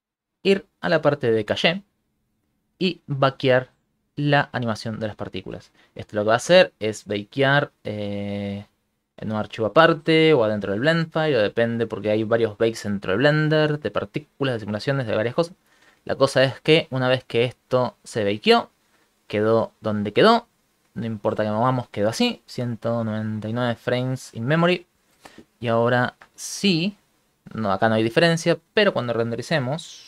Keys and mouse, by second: 17.3 click, 27.1 click, 27.7 click, 28.7 click.